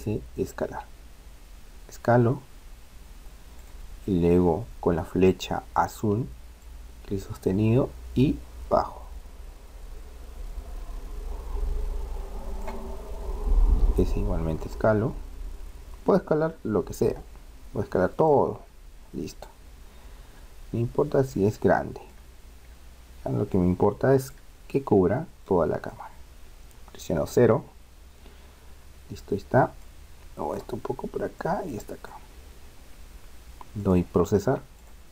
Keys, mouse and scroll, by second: 6.6-8.4 drag, 13.7 s, 20.1-27.4 middle drag, 27.4 KP_0, 28.8-29.8 middle drag, 29.8-33.2 drag, 33.7-35.1 drag.